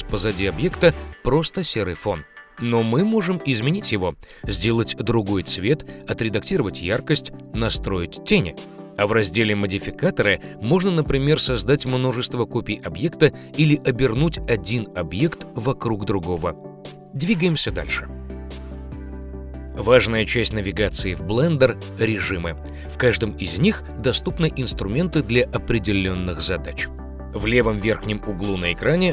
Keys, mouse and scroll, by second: 16.7 x.